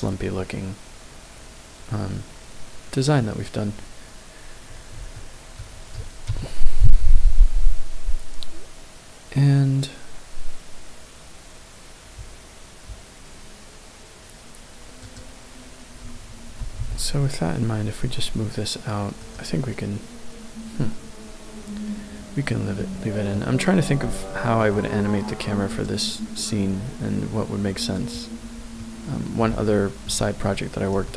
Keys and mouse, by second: 0.4-3.1 middle drag, 5.1-5.6 shift+middle drag, 6.3 KP_0, 15.1 click, 16.5 g, 16.8 x, 19.1 right click, 22.8-23.2 middle drag, 24.2-24.6 shift+middle drag, 28.8-29.4 middle drag, 29.6-30.0 shift+middle drag, 31.0-31.1 shift+middle drag.